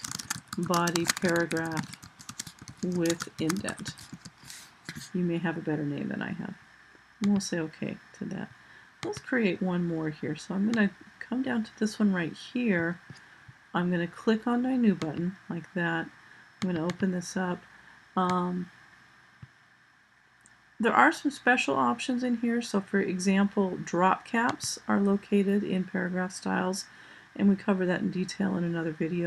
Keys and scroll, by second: 0.0-4.5 typing.